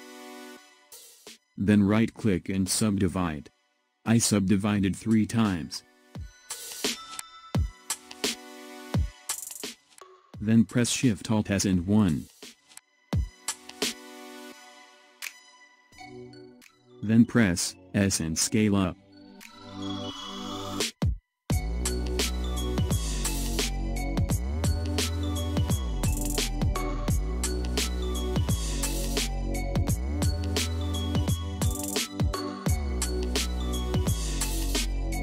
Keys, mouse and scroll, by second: 1.6-11.7 right drag, 11.7 alt+shift+s, 13.8-16.8 middle drag, 26.3-26.9 scroll down 1, 26.9-31.2 middle drag, 31.2 click, 32.3 shift+click, 33.1-34.8 middle drag, 34.8 shift+click.